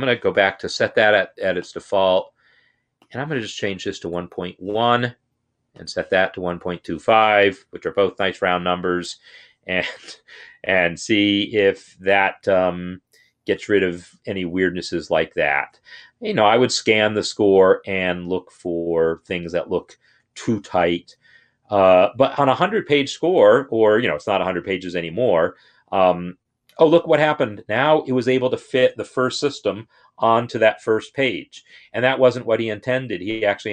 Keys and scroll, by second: 6.5 shift+Left, 7.3 1.